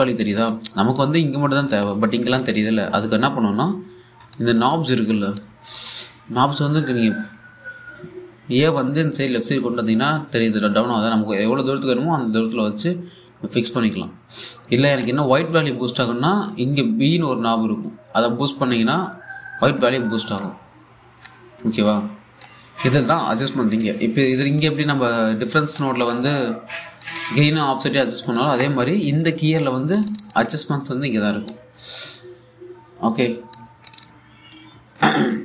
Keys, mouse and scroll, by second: 5.0-16.0 drag, 16.6-25.0 drag, 22.2 typing, 25.7-26.3 scroll down 1, 26.4 alt+click, 27.1-27.6 scroll up 1, 27.6 click, 29.9-30.6 scroll up 1, 30.6 click, 32.1-34.5 drag.